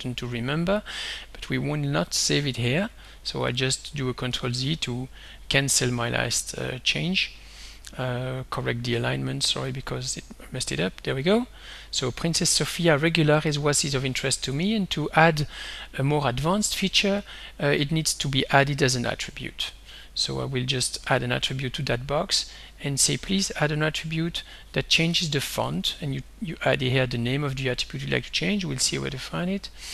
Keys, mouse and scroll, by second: 3.1 click, 4.3 ctrl+z, 5.9 click, 8.2 click, 10.1 click, 11.6 click, 12.5 ctrl+s, 14.7 click, 17.3 right click, 21.9 click, 23.2 click, 24.4 click, 24.8-26.1 typing, 29.4 click.